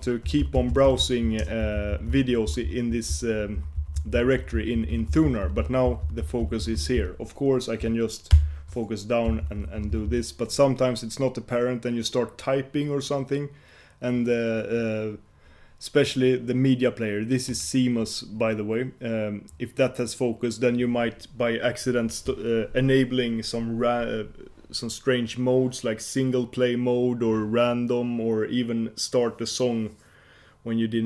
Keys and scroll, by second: 8.4 shift+super+j.